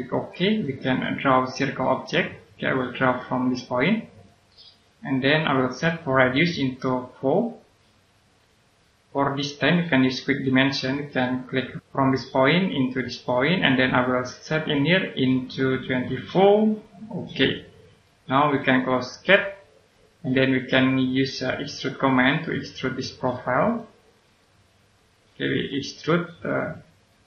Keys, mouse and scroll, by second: 2.7 scroll up 1, 4.1 click, 7.1 4, 8.3 click, 15.7-16.7 typing, 17.3 click, 24.3 right click, 25.1 click, 25.8 right click.